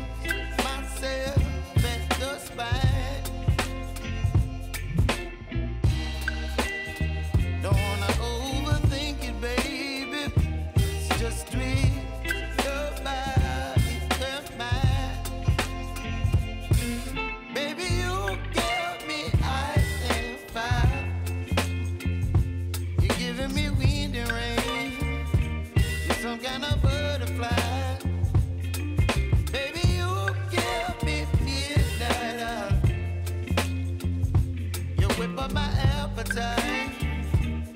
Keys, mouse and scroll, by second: 0.2-2.9 drag, 5.2-5.5 scroll down 1, 6.3 click, 8.6 click, 9.5 u, 11.0-21.6 drag, 22.9 Return, 24.2 click, 27.9 Return, 29.0 r, 29.8 click, 31.0 Return, 32.1 ctrl+z, 33.1 ctrl+alt+Home, 34.2 click, 37.4 Return.